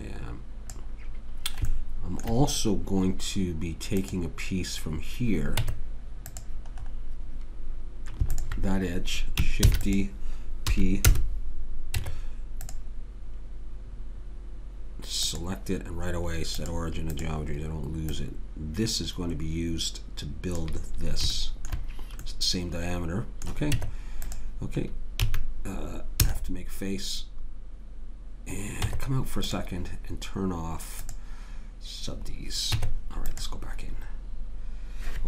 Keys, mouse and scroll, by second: 0.0 click, 4.0-5.6 right drag, 5.6 Tab, 8.3 click, 9.7 shift+d, 10.7 p, 12.0 Tab, 15.3-19.7 drag, 21.4-23.7 middle drag, 23.7 Tab, 25.2 a, 26.2 f, 28.8 Tab, 31.0-32.2 drag, 32.7 Tab.